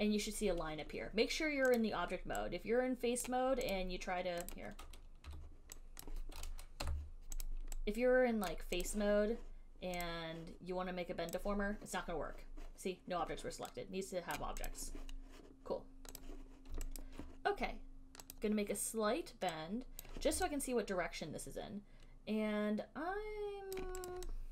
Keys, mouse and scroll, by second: 3.5 right click, 4.0 click, 4.8 click, 5.6 right click, 6.3 click, 7.1 Delete, 7.7 click, 8.7 right click, 9.2 click, 10.3 click, 12.1 click, 14.6 right click, 14.9 click, 16.4 click, 17.2 alt+right click, 18.5 click, 20.2 right click, 24.0 alt+click, 24.3 alt+click.